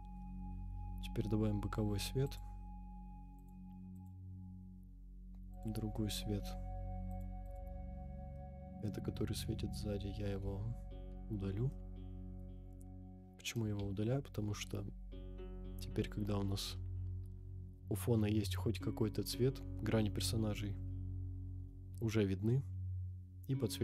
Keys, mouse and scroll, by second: 2.2 click, 3.4 click, 3.9 click, 5.5 click, 6.0 middle click, 6.2 scroll down 2, 7.1 click, 7.4 click, 8.1 scroll down 2, 8.3 middle click, 10.5 Delete, 11.7-12.4 middle drag, 12.8-13.1 scroll up 1, 14.4 KP_0, 15.3-15.8 scroll up 1, 19.3 scroll up 2, 20.5-21.4 scroll up 6, 22.5-23.8 scroll down 8.